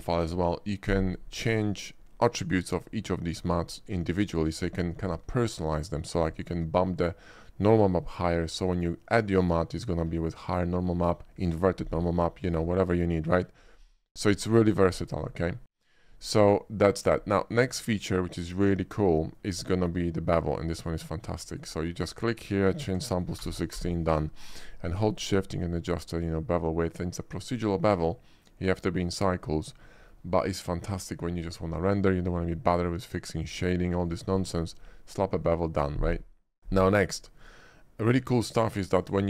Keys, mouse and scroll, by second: 13.5 typing, 17.2 middle click, 17.8 click, 18.5 click, 19.2 middle drag, 19.8 shift+middle click, 20.8 shift+click, 21.5 shift+click, 22.3 shift+click, 23.7 1, 23.7 6, 23.9 Return, 25.5-27.7 shift+drag, 28.1 shift+middle click, 29.3 shift+middle click, 29.5 shift+middle click, 30.0 shift+middle click, 30.4 shift+middle click, 36.2 middle click, 37.4 click, 39.1 click.